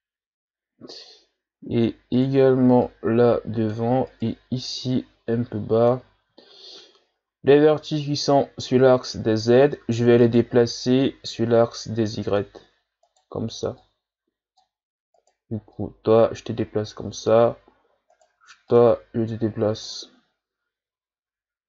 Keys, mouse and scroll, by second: 0.3-1.3 ctrl+scroll up 1, 2.1 right click, 2.8-4.0 drag, 4.0 right click, 4.9-6.5 drag, 6.5-7.4 shift+scroll up 2, 7.4-7.9 ctrl+scroll up 2, 10.2 right click, 11.0-13.0 drag, 13.0 right click, 13.8-15.2 drag, 15.2 right click, 15.7-18.1 drag, 18.1 right click, 18.7-21.6 drag.